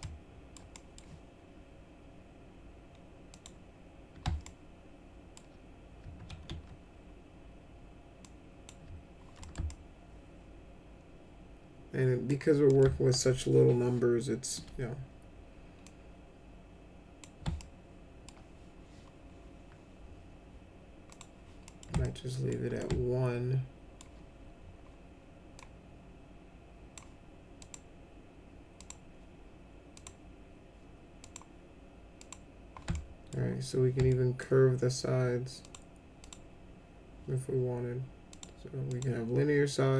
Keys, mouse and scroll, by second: 0.0 alt+middle click, 0.7 middle click, 3.3 click, 4.4 alt+middle click, 6.3 ctrl+z, 8.2 click, 9.4 middle click, 9.6-12.3 alt+middle drag, 12.6 middle click, 15.8-17.2 drag, 17.6 alt+middle click, 21.1 click, 21.6 middle click, 22.0 alt+middle click, 22.8-23.9 alt+middle drag, 25.5-26.9 drag, 27.6 click, 28.7 click, 29.9 click, 31.2 click, 32.2 click, 32.9 alt+middle click, 34.1 alt+middle click, 35.6 click, 36.2 click, 38.3 click, 38.9 click.